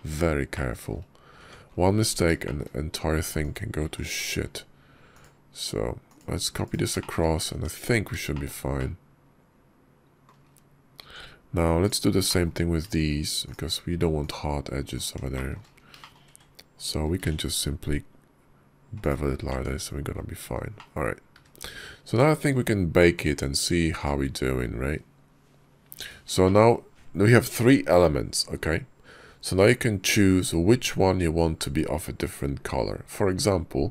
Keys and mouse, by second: 0.4 shift+click, 1.3 Tab, 2.3 shift+click, 3.3 click, 3.8 alt+x, 5.1-6.4 shift+drag, 6.8 shift+click, 7.3 Tab, 8.2 shift+middle click, 8.6-10.1 middle drag, 12.1 middle click, 13.3 shift+middle click, 14.8 shift+middle click, 15.9 shift+middle click, 17.0 ctrl+shift+b, 19.4 Tab, 20.6 click, 21.2 `, 23.0 click, 26.3 shift+click.